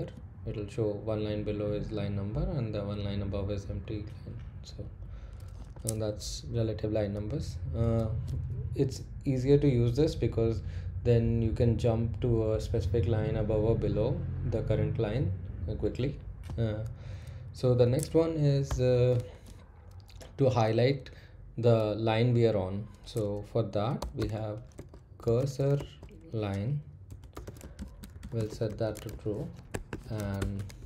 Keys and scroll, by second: 4.8 Page_Down, 18.6 o, 23.7-30.8 typing.